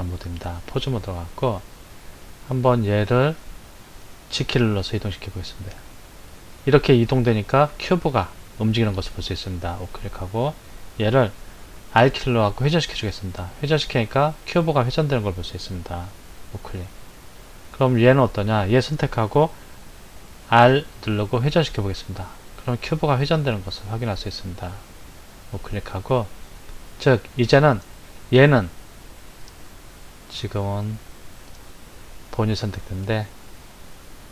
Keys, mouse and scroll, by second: 2.7 click, 4.5 g, 11.6 r, 17.8 click, 20.4 r, 26.1 click, 28.1 click, 33.0 click.